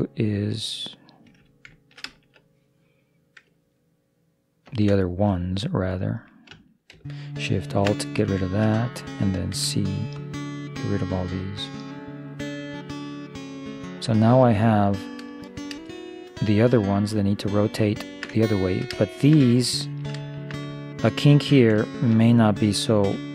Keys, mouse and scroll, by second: 2.1-4.1 middle drag, 4.7 ctrl+i, 7.5-8.8 right drag, 8.4 middle click, 9.4 middle click, 9.6 c, 16.0-23.3 middle drag.